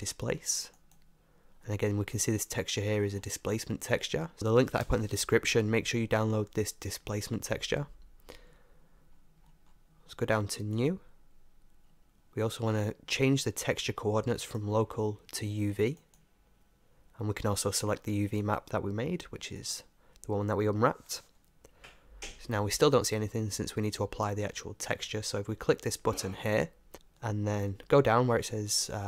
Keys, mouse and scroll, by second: 3.2-4.4 middle drag, 9.2-10.8 middle drag, 10.8-16.3 drag, 18.4-20.2 drag, 26.9-28.2 drag.